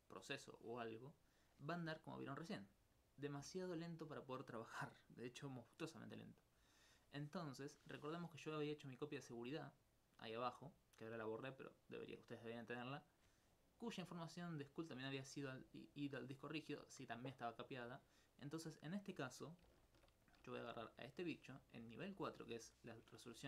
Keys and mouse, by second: 18.4 middle click.